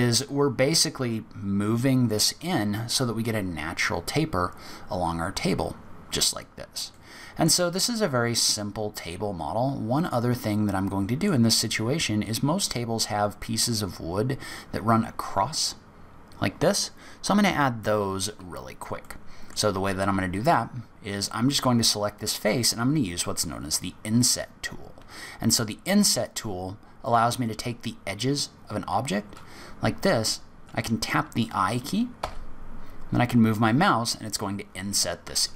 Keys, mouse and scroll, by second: 6.4-6.9 scroll down 4, 6.9 middle click, 8.0-8.6 scroll up 1, 8.6 middle click, 8.6-10.0 scroll up 1, 12.2-12.8 scroll down 1, 19.0 middle click, 19.8-20.4 scroll up 1, 20.4 click, 21.0-22.4 scroll up 7.